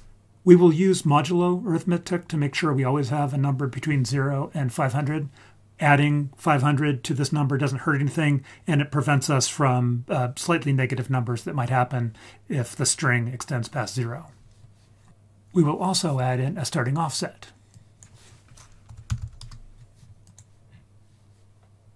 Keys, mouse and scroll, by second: 17.7-19.4 drag, 19.2 d, 20.2 click, 20.6-21.9 scroll down 3.